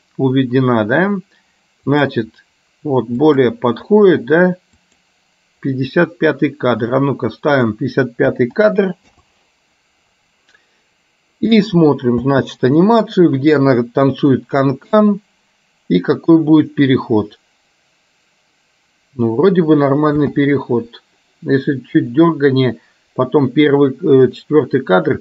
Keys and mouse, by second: 2.1 click, 3.4 click, 5.0 click, 7.6-9.1 drag, 8.6 KP_5, 12.5 space, 20.2 space, 22.2-24.5 drag.